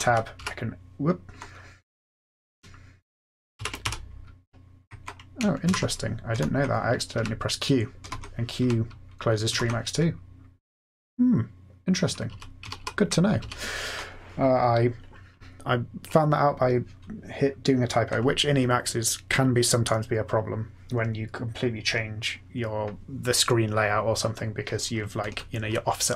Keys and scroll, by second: 0.0 Down, 0.3 Up, 0.3 q, 3.5 ctrl+x, 3.8 o, 5.6 ctrl+g, 6.3 F8, 7.1-9.5 typing, 9.5 F8, 12.2 Down, 12.2-13.2 typing, 13.3 Down.